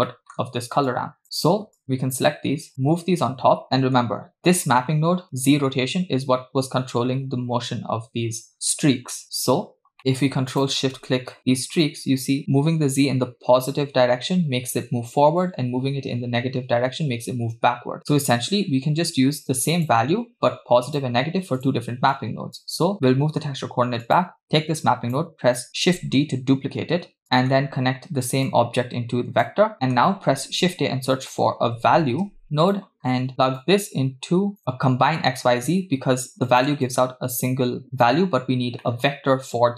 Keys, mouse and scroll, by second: 0.1 middle click, 0.9-1.2 drag, 1.4 drag, 1.8 click, 2.7 click, 3.6 scroll up 5, 3.8 middle click, 9.7 scroll down 2, 10.0 click, 10.8 ctrl+shift+click, 12.4-18.3 drag, 18.6-19.7 scroll up 2, 19.7 scroll up 1, 19.8-20.9 drag, 21.6 click, 22.2 click, 22.9 scroll down 2, 23.1 middle click, 24.1 click, 24.9 drag, 25.6 click, 25.9 shift+d, 27.2 scroll down 1, 27.3 middle click, 28.5-29.5 drag, 29.7-30.1 middle drag, 30.4 shift+a, 33.0-33.6 scroll up 2, 33.6-34.6 drag, 36.5 click, 36.9-38.1 drag, 38.9 middle click.